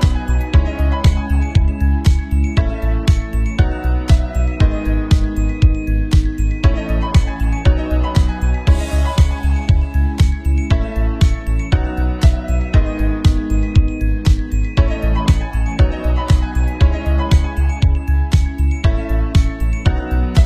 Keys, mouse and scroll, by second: 2.1 shift+s, 2.4 ctrl+a, 2.7 Tab, 3.1 alt+middle click, 3.9 KP_0, 4.2 Tab, 4.7 shift+middle click, 6.1 shift+middle click, 6.2 ctrl+shift+middle click, 10.5 shift+a, 11.5 Tab, 11.5 KP_2, 11.6 Tab, 11.6 shift+s, 13.2 Tab, 13.2 ctrl+r, 13.4 ctrl+r, 13.7 Tab, 14.0-17.4 typing, 16.5 middle click, 16.6 click, 17.0 ctrl+r, 17.2 Tab, 17.4 Tab, 17.5 click, 17.7 Tab, 18.1-20.4 drag.